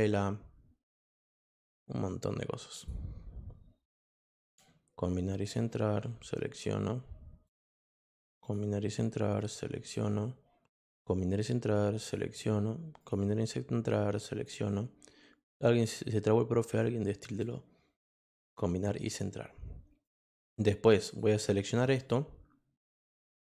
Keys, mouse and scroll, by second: 0.9 click, 2.8 click, 3.9 click, 5.4 click, 6.3-7.4 drag, 8.4 click, 9.3 click, 10.6 click, 11.4 click, 13.0 click, 13.8 click, 15.7 click, 16.7 click, 18.8 click, 20.0-21.1 drag, 21.9-23.1 drag.